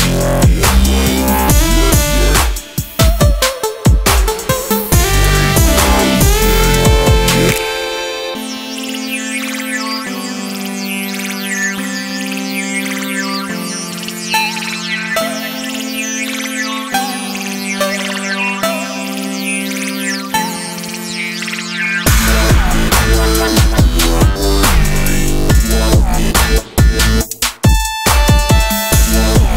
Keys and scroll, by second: 15.3 space, 21.8 space, 25.3 space.